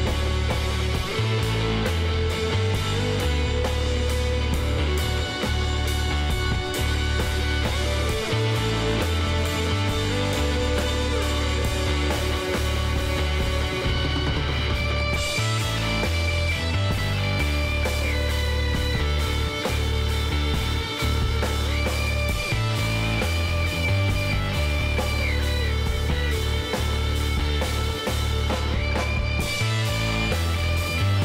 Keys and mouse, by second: 0.7 ctrl+r, 2.8 s, 6.7 s, 11.5-15.5 middle drag, 15.5 KP_7, 16.3-18.8 middle drag, 18.1-24.1 drag, 24.0-25.6 middle drag, 24.9 KP_1, 26.4 s, 30.8-31.2 middle drag.